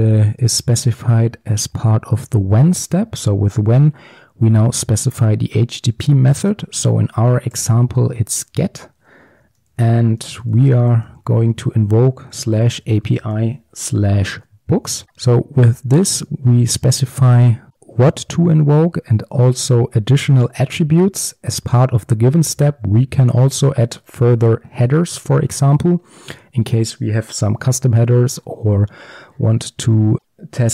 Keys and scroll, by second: 0.4 Tab, 8.8 Return, 23.7 Tab.